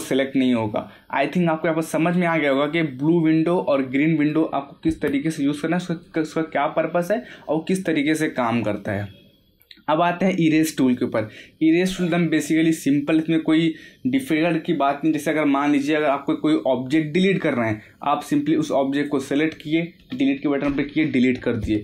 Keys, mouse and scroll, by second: 2.6-5.4 middle drag, 5.4-5.9 scroll down 1, 5.9 middle click, 6.0-7.7 middle drag, 7.7 scroll up 1, 8.2 middle click, 8.7 scroll up 1, 9.6-10.1 scroll down 1, 10.3-13.3 middle drag, 18.9 click.